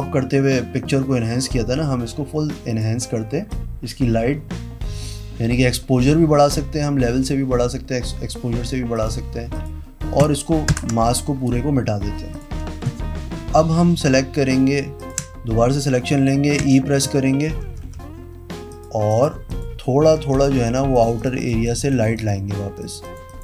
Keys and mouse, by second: 0.2-1.2 drag, 10.9 alt+BackSpace, 15.2 ctrl+click, 16.8 e, 17.8 ], 18.0 ], 19.3 click, 19.7 click, 20.2 [, 20.5 [, 20.5 click, 20.8 click, 21.6 click, 22.1 click, 22.3 click, 22.8 ], 23.2 click.